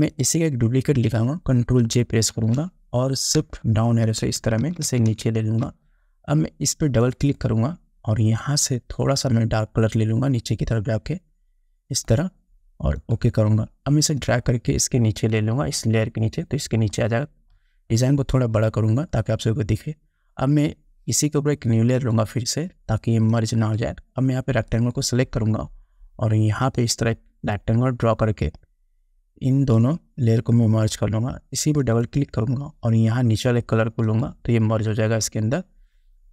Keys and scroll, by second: 2.5 ctrl+j, 4.2 shift+Down.